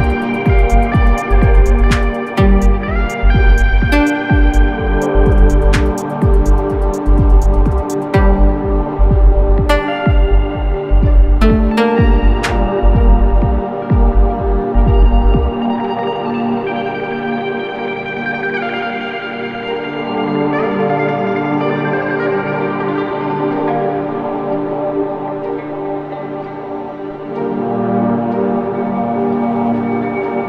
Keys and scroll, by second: 0.0-0.7 typing, 2.1 [, 2.4 ], 3.5 4, 11.9 ctrl+d, 12.1 Escape.